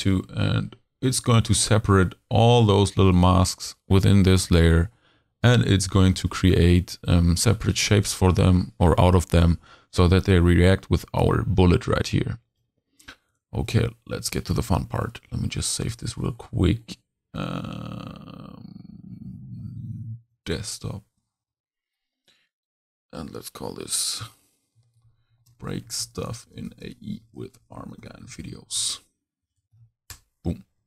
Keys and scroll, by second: 14.8 super+s, 24.8-29.7 typing.